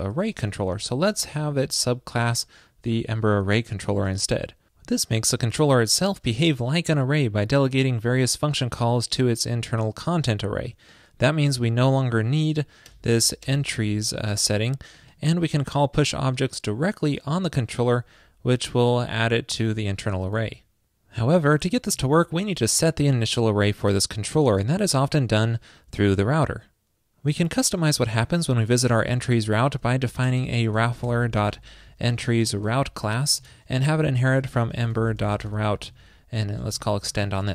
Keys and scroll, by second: 2.8 alt+Left, 22.0 super+s.